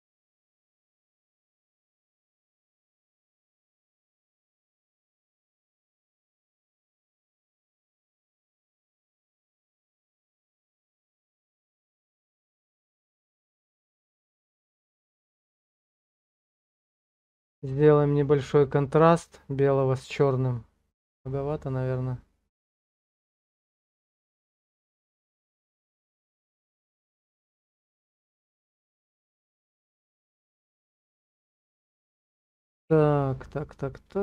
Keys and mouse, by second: 0.2 middle click, 1.4 shift+middle click, 8.7-12.6 drag, 13.4 click, 21.0 click, 28.6 click, 30.4 click, 31.3 click.